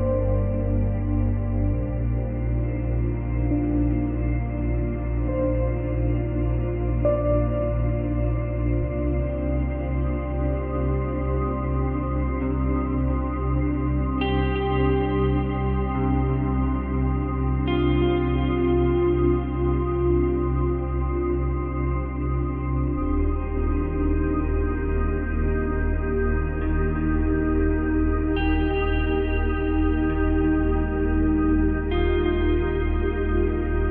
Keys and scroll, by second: 16.4 Delete, 26.3 space, 27.1 space.